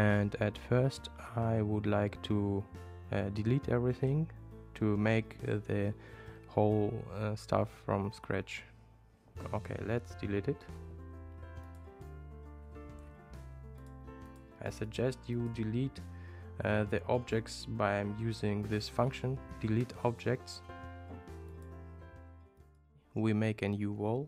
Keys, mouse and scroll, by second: 11.7 click, 13.8 super+click, 14.3 super+click, 14.9 super+click, 15.4 super+click, 21.5-22.9 drag, 24.1 click.